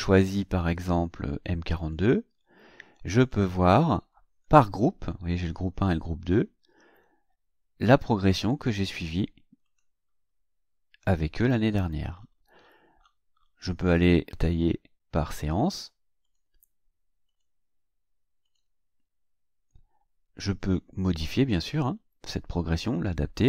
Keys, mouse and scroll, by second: 1.8 click, 3.2 click, 8.0-8.4 scroll down 1, 8.8 scroll up 1, 9.7 click, 10.1-10.5 scroll down 1, 10.6-11.0 scroll down 2, 11.5-11.8 scroll down 2, 12.2-13.6 scroll up 8, 16.3 click, 17.3 click, 18.5 click.